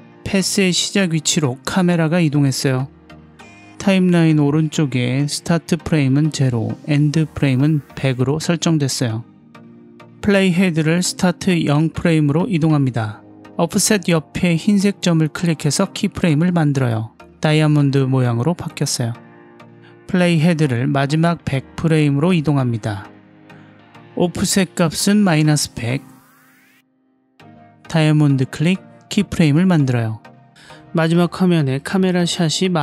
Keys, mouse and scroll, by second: 11.5-12.0 drag, 17.2 click, 20.7-22.3 drag, 24.0-26.0 drag, 25.7 KP_0, 29.7 click, 32.0-32.5 scroll up 2, 32.6-32.8 shift+middle drag.